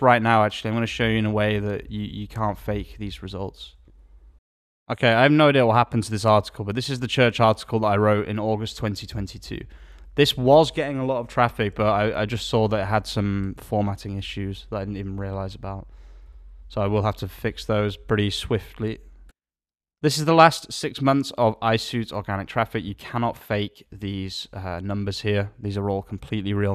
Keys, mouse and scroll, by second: 2.7 alt+a.